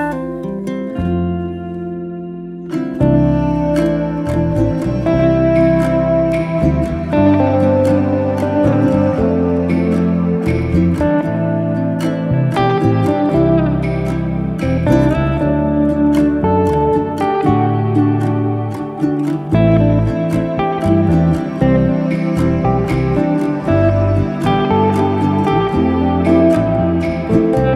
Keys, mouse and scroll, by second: 2.6-3.8 shift+r, 4.3 shift+r, 5.5 shift+r, 6.6-9.1 middle drag, 9.1 s, 12.7 ctrl+z, 13.0-14.6 middle drag, 14.6 ctrl+z, 15.1 middle click, 15.8 KP_7, 17.6 shift+d, 21.4-22.2 middle drag, 22.2 Tab, 22.4 scroll up 1, 22.7-24.2 middle drag, 27.2 h.